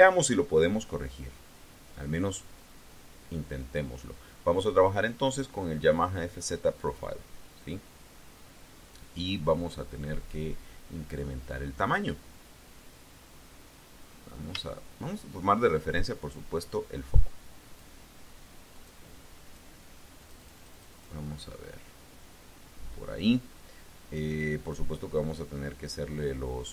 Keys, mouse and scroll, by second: 0.8 middle click, 1.8 middle click, 1.9-2.4 scroll down 2, 12.6-14.5 scroll up 9, 14.5 shift+middle click, 17.5 click, 18.6 click, 19.3 click, 20.0-21.0 drag.